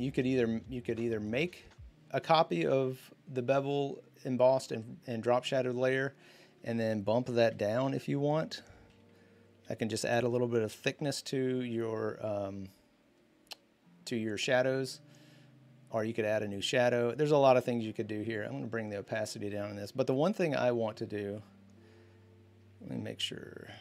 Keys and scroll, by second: 7.3 v, 9.8 Up.